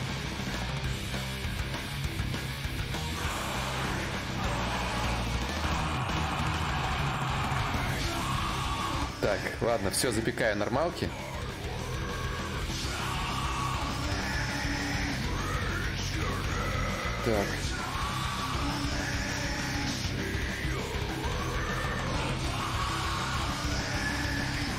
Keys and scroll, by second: 13.4 alt+Tab.